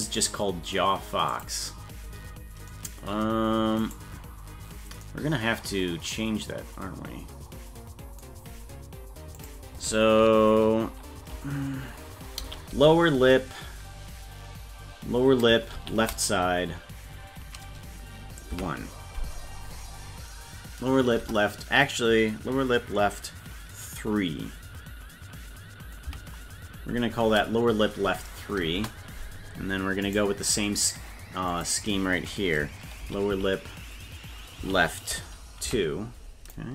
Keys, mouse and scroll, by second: 1.3-4.0 drag, 9.4-29.2 drag, 30.1 right click, 31.5-36.7 drag, 33.3 shift+l.